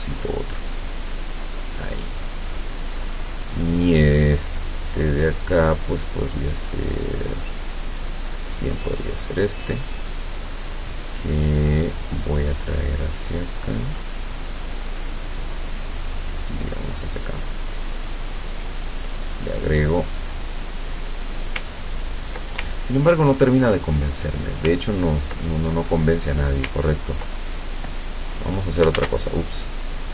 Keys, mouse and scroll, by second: 8.6 click, 12.4-17.3 drag, 18.6 click, 19.6-21.6 drag, 21.8-22.1 ctrl+scroll down 1, 22.8 ctrl+scroll down 1, 24.3 click, 25.0 ctrl+scroll up 2, 25.5 ctrl+middle click, 27.8 click, 29.0 ctrl+z, 29.8 click.